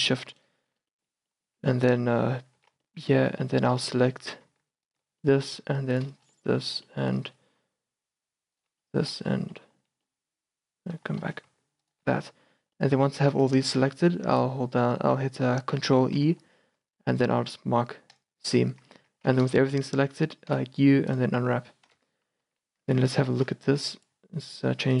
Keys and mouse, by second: 1.6 z, 2.6 z, 2.9 middle click, 3.1 middle click, 3.3 middle click, 3.7 middle click, 4.2 middle click, 4.9-13.3 middle drag, 13.3 click, 13.4 z, 16.3 ctrl+e, 18.9 a, 19.1 a, 20.5 u, 22.0 KP_0, 22.5 z, 22.9 Tab, 24.2-25.0 drag.